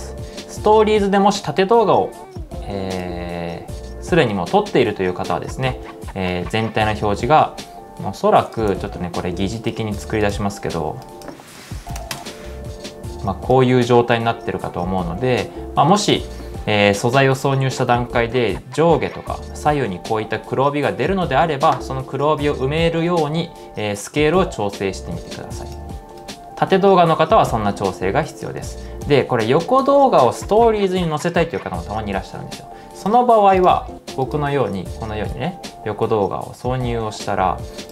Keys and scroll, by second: 8.8 super+z, 10.9-12.4 typing, 28.8 super+z, 29.1 super+z, 29.9 super+z.